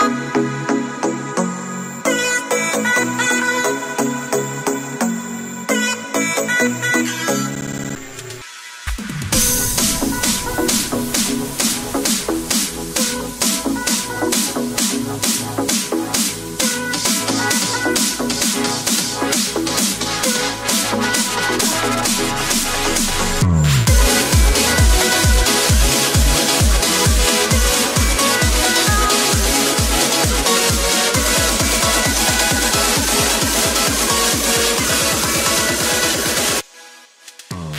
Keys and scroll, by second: 16.4 ctrl+l, 18.8 ctrl+l.